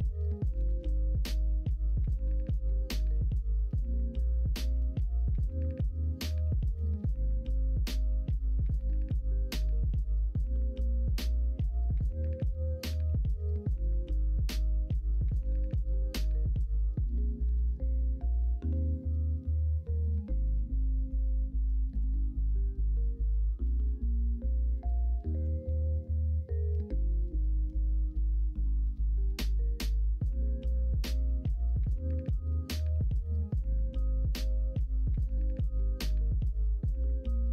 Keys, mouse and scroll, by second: 4.0 middle click, 4.7 ctrl+r, 10.1-11.4 middle drag, 14.2 middle click, 15.5 middle click, 18.6 3, 19.7 KP_1, 19.9 KP_3, 21.9 0, 23.0-24.6 drag, 24.7 ctrl+z, 25.4 o, 27.7 click, 28.6 ctrl+z.